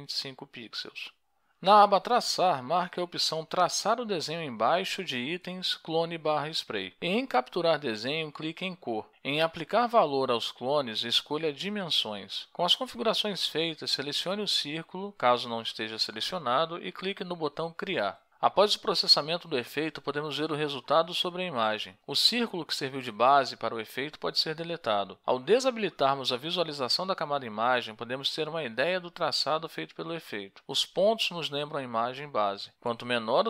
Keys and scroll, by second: 25.3 4, 29.0 ctrl+shift+l.